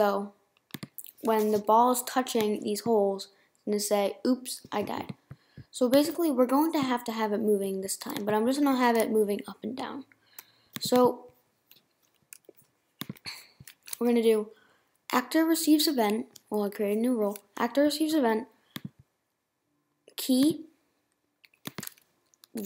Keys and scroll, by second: 1.2 BackSpace.